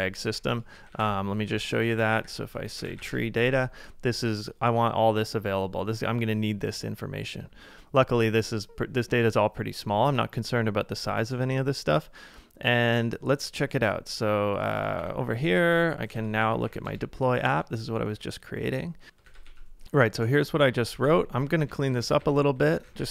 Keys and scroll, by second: 0.2 ctrl+d, 0.5-3.2 typing, 14.8 ctrl+a, 15.0 typing, 15.7 ctrl+a, 16.2 ctrl+c, 18.0 j, 19.3 ctrl+a, 19.8-23.1 typing.